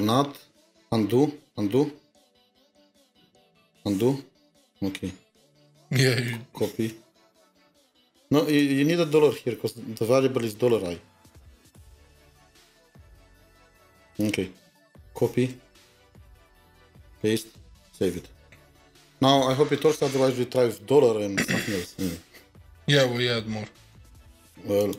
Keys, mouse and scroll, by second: 2.9 typing, 3.6 ctrl+z, 4.6 ctrl+z, 6.9 typing, 13.4-14.4 typing, 17.6 typing, 23.0 typing, 23.1-24.1 scroll down 2.